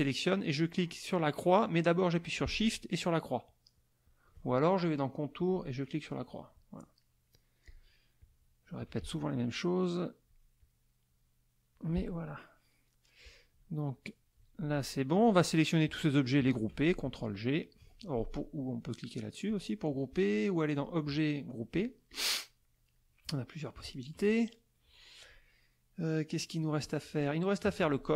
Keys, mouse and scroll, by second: 5.3 click, 6.1 click, 7.0 middle click, 7.6 click, 8.2 click, 8.8-10.5 drag, 9.0 space, 10.6-11.9 drag, 13.8 click, 15.1 shift+click, 15.8 shift+click, 16.4 shift+click, 19.5 click, 20.8 click, 22.1 click, 22.5 middle click, 23.8 KP_Subtract, 24.4 middle click, 24.9 middle click, 25.6 middle click, 26.4 middle click, 27.7 z, 27.9 click.